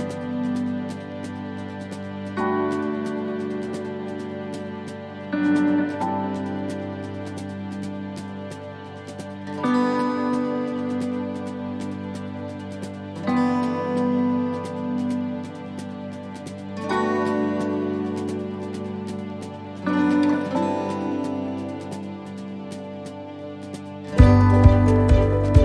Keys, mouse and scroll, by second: 1.2 click, 1.2 right click, 1.8 shift+right click, 2.9 shift+right click, 3.1 middle click, 3.7 shift+middle click, 5.2 e, 7.0 middle click, 7.6-8.0 scroll up 3, 8.0 middle click, 8.6-8.9 scroll up 1, 8.9 middle click, 10.0 shift+right click, 11.1 shift+right click, 11.6 shift+right click, 11.9 shift+right click, 12.6 shift+right click, 12.7 middle click, 13.7 shift+right click, 14.0 middle click, 15.1 shift+right click, 15.7 shift+right click, 16.6 shift+right click, 16.8 middle click, 18.0 middle click, 18.3 scroll down 2, 19.2 u, 22.2 click, 23.5 click, 23.5 middle click, 24.9 scroll up 1, 25.2 shift+middle click.